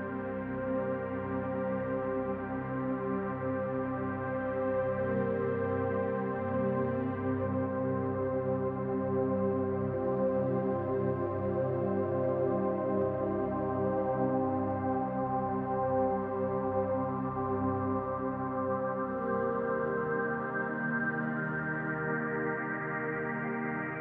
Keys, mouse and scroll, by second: 0.2 scroll down 1, 0.5 middle click, 3.6-5.2 scroll up 3, 5.2-7.0 scroll up 1, 5.2 s, 9.1 middle click, 10.2 click, 10.6-11.2 scroll down 1, 11.2-11.9 scroll down 1, 11.9 middle click, 14.5 shift+d, 15.8 click, 16.6 middle click, 17.7 click, 18.7 middle click, 20.2 click, 22.0-23.2 scroll up 2, 23.2-23.8 scroll up 1, 23.8 s.